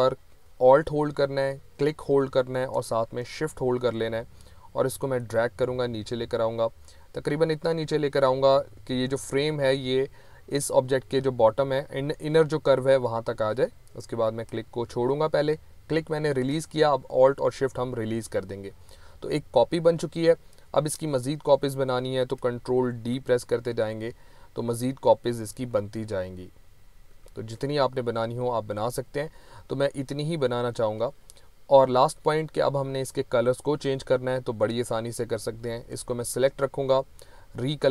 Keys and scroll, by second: 22.9 ctrl+d, 25.3 ctrl+d, 27.1 ctrl+d.